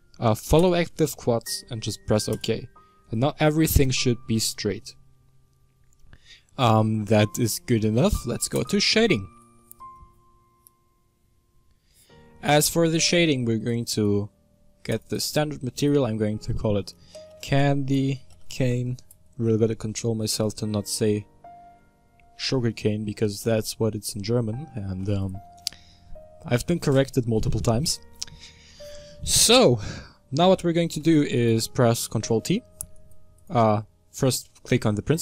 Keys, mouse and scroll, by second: 11.0 click, 15.0-20.2 drag, 33.2 click.